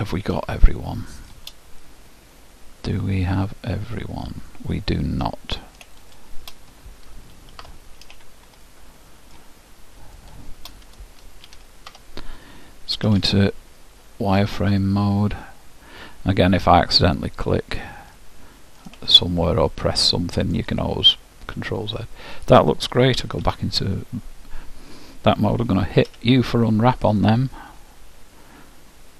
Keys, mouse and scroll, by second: 0.6-3.8 ctrl+alt+shift+middle drag, 6.2-8.2 drag, 8.8-10.7 ctrl+alt+shift+middle drag, 10.3-12.1 ctrl+alt+shift+drag, 13.1 ctrl+alt+shift+z, 14.7-16.3 middle drag, 17.1-18.9 drag, 18.3-22.7 middle drag, 23.3 z, 26.2 u.